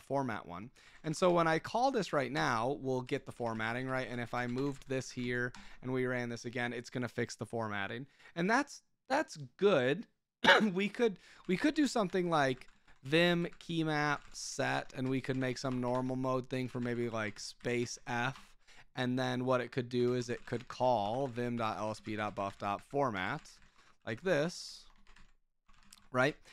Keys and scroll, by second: 0.0-1.6 typing, 2.3 Return, 3.0 Escape, 3.1-5.5 typing, 5.5 Return, 11.2-18.7 typing, 20.0-26.5 typing.